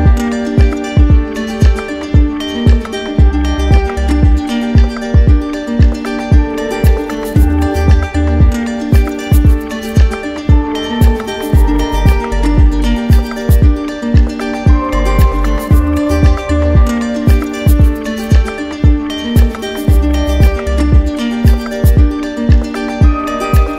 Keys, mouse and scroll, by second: 0.9 q, 2.2 click, 3.5 right click, 4.1 right click, 5.9 right click, 7.2 right click, 7.8 right click, 8.6 shift+right click, 9.3 shift+right click, 12.2 click, 13.2 click, 14.5 right click, 15.2 click, 16.0 right click, 18.1 z, 20.1 click, 22.6 w.